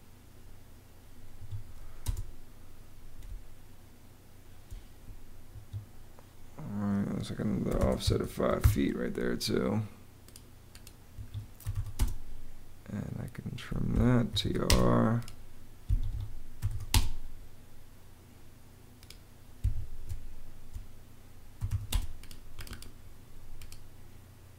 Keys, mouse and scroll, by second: 1.3 Escape, 1.8 space, 3.1 space, 5.3 Escape, 7.3-8.8 typing, 11.0 Escape, 11.2-12.0 typing, 13.7 Escape, 13.9-14.7 typing, 15.3 click, 15.7 Escape, 16.2-17.0 typing, 18.8 click, 19.4 Escape, 19.9 space, 21.2-22.0 typing.